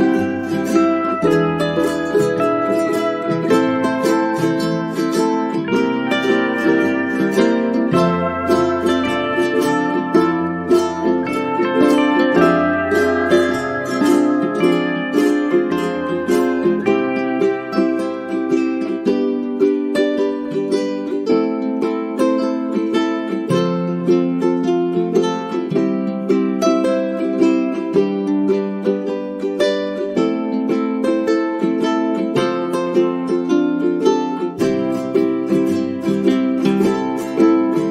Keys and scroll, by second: 1.7 alt+shift+j, 5.1 8, 5.8 Return, 31.4 alt+shift+j, 33.6 1, 33.8 ., 34.4 Return.